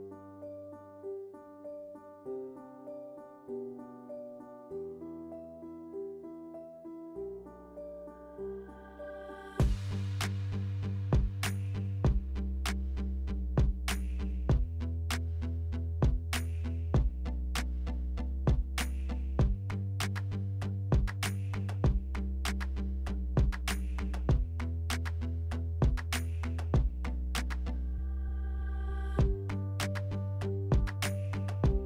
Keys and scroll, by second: 0.4 4, 2.9-3.8 typing, 12.0 3, 13.3 alt+e, 13.7 3, 16.3 s, 17.0 2, 18.4 2, 26.9-27.8 typing, 29.9 alt+e.